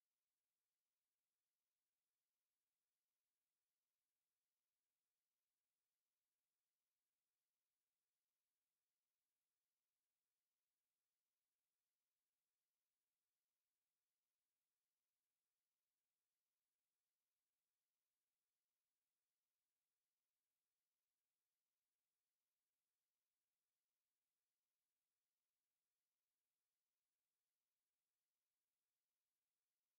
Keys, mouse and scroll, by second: 0.1 click, 0.5 click, 1.2-5.1 drag, 8.3 click, 12.3 shift+b, 14.1 click, 18.0 click, 19.3 click, 23.1 click, 25.1 click, 27.5 click, 28.7 click, 29.7 click.